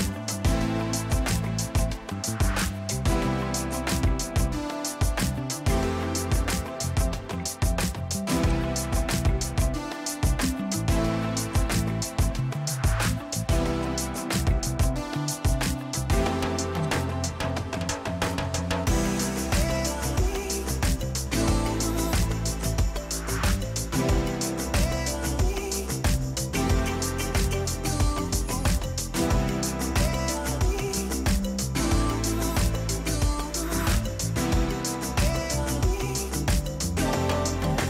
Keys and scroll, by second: 0.0-1.8 typing, 3.6-4.4 typing, 7.7 Escape, 7.9 r, 16.3 f, 17.5-18.9 typing, 19.9 Delete, 21.3 p, 24.6-29.6 typing, 32.4 ctrl+g, 34.7 m, 35.7-37.8 typing.